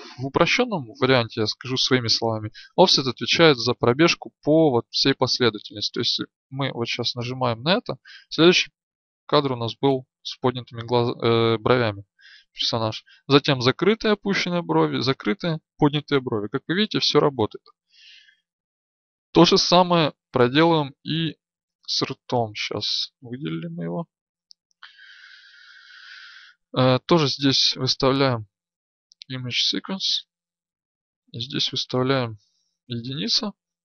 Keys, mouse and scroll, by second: 20.4 right click, 25.7-33.8 drag.